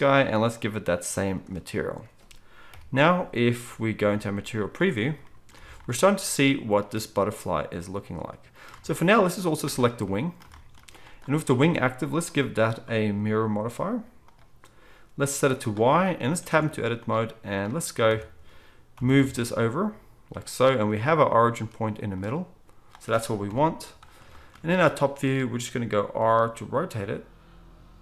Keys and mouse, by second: 2.7-5.8 drag, 2.7-5.8 middle drag, 2.7 KP_1, 4.2 z, 9.1-21.1 middle drag, 16.4 Tab, 18.1 a, 18.9 g, 21.1-28.0 right drag, 23.5 KP_7, 24.6 z, 26.2 r.